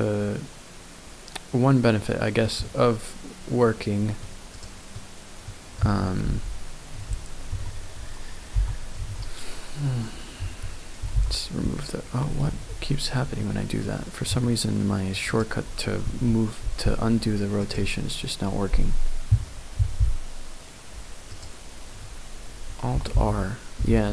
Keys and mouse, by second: 2.7 middle click, 3.7 middle click, 4.5 click, 4.9 click, 6.2 KP_1, 7.5 Tab, 8.5 r, 9.0 z, 10.4 Escape, 12.7 ctrl+z, 13.4 click, 13.5 middle click, 13.6 click, 13.6 middle click, 14.3 Tab, 14.8 middle click, 16.0 ctrl+s, 21.3 click.